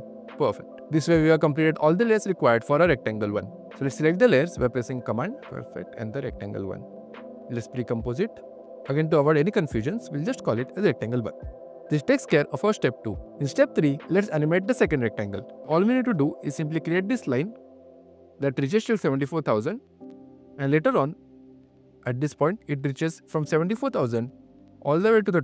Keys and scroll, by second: 0.6 q, 3.5 super+q, 4.8 super+q, 6.4 super+q, 14.8 q.